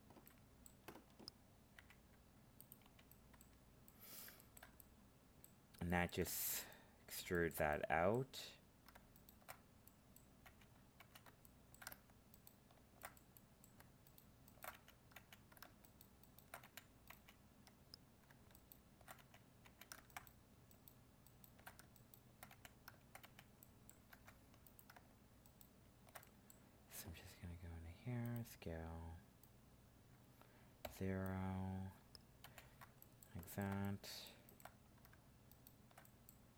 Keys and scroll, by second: 24.1 ctrl+Tab.